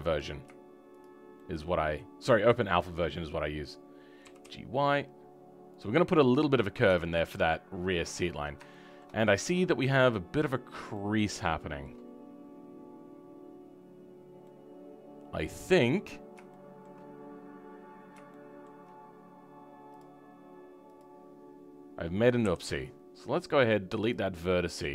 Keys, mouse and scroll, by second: 0.0-1.0 scroll up 4, 1.0 shift+click, 1.3-4.3 shift+middle drag, 4.3 g, 5.9 scroll down 2, 6.2 middle click, 6.8 Tab, 7.1-8.1 middle drag, 8.1-8.7 scroll up 4, 8.7 shift+middle click, 9.4 Tab, 10.1-10.9 scroll up 1, 10.9-20.0 shift+middle drag, 20.0-21.0 drag, 24.1 Delete, 24.4-24.9 middle drag.